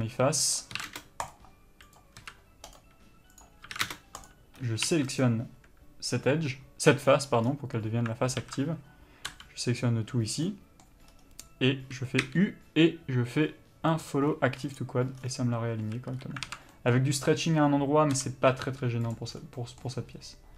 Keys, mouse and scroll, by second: 0.8 click, 1.0 s, 1.5 click, 2.4 s, 3.0 right click, 3.6 click, 3.9 s, 4.5 click, 7.7-8.6 scroll down 1, 8.6 alt+a, 9.5 l, 10.7 middle click, 11.3-14.7 scroll up 1, 15.0 u, 16.1 a, 16.7 alt+a, 18.4 l, 18.9 g, 19.4 click.